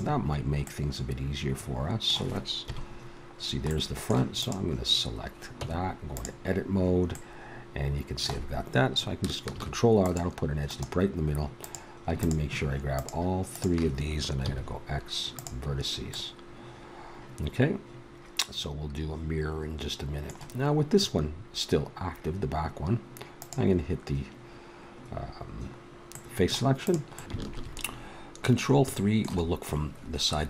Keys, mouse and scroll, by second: 0.0 middle click, 2.5 middle click, 2.6 KP_1, 4.4-5.5 middle drag, 5.5 Tab, 9.5 ctrl+r, 11.6-15.3 drag, 14.4 x, 16.1-18.1 middle drag, 23.4-25.1 drag, 26.8 middle click, 27.4 ctrl+KP_3.